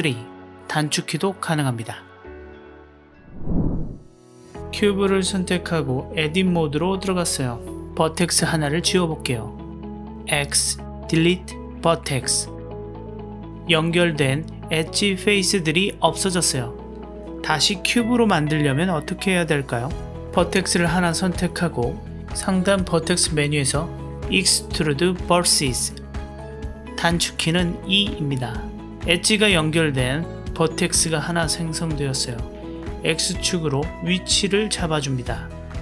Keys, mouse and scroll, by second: 2.2 click, 2.9 g, 8.2 click, 9.8 x, 15.1 x, 16.1-20.4 middle drag, 21.3 click, 24.1-26.7 drag, 27.8 e, 33.1-35.3 x, 35.6 middle click.